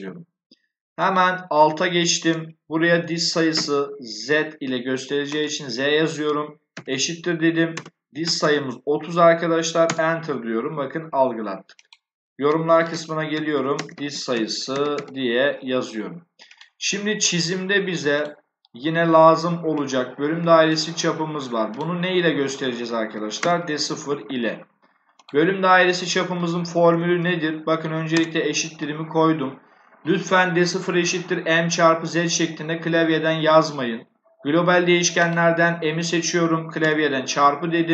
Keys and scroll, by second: 3.4 z, 6.6 shift+0, 7.6-8.8 typing, 9.7 Return, 12.6-15.3 typing, 22.8-23.8 typing, 26.8 shift+0, 28.1 BackSpace, 36.7 *.